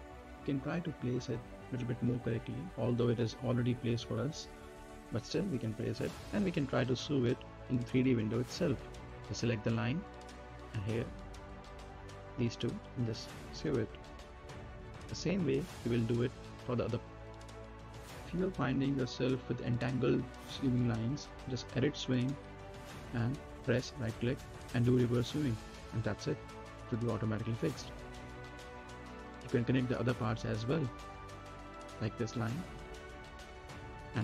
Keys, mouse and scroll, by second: 0.2 scroll down 1, 1.4 middle click, 1.9 right click, 3.1-4.7 drag, 4.7-6.2 right drag, 6.2 click, 7.0 right click, 7.4 scroll down 1, 7.8 middle click, 8.0 scroll down 1, 8.5 right click, 9.5 n, 10.4 click, 15.0 right click, 16.0 scroll down 1, 16.5 middle click, 16.7 scroll down 1, 16.9-20.2 right drag, 20.2 click, 23.2 right click, 25.4 click, 26.0 scroll up 1, 26.5-28.8 right drag, 28.8 middle click, 29.1-29.8 scroll down 1, 29.8 middle click, 30.1 right click, 30.8 middle click, 31.2-32.9 right drag, 32.9 n, 33.6 click.